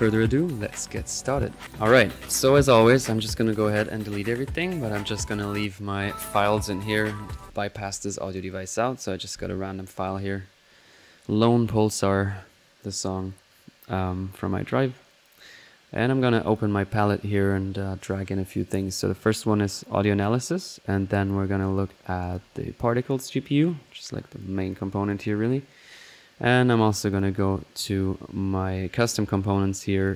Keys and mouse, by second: 1.6-2.3 ctrl+drag, 2.6 click, 3.3 click, 3.8-4.2 drag, 4.2-5.3 right drag, 7.4-8.6 drag, 8.8-11.4 drag, 15.1-18.7 drag, 19.3-20.4 drag, 20.6 click, 20.7-21.6 middle drag, 22.2 click, 23.0-27.6 drag, 27.6-28.7 middle drag, 30.0-30.1 drag.